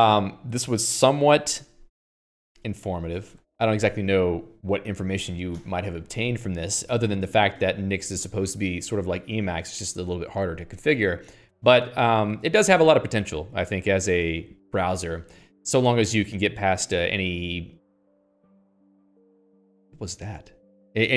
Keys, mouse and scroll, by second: 3.0 k.